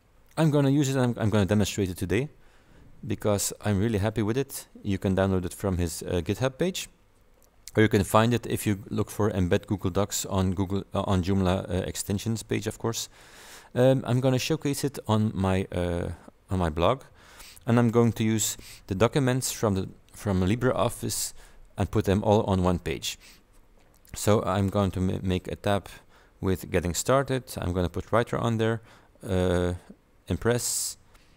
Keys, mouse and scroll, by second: 3.2 click, 12.0 click, 18.0 click.